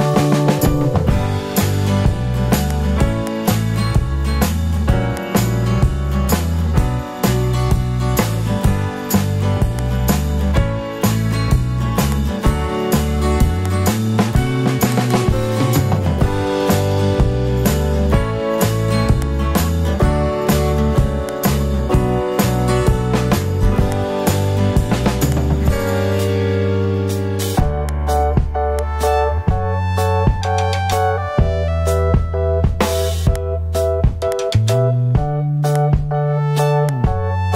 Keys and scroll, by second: 6.2 super+0.